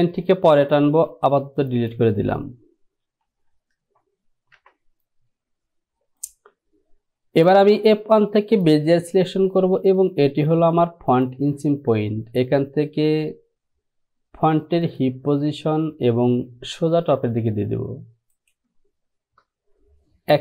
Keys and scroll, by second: 3.3 Home, 4.7 Return.